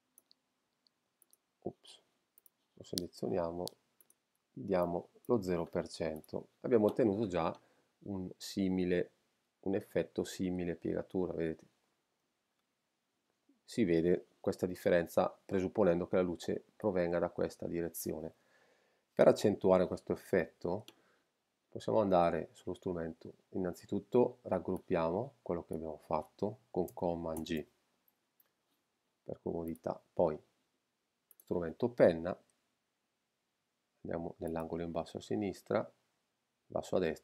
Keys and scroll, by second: 27.3 super+g.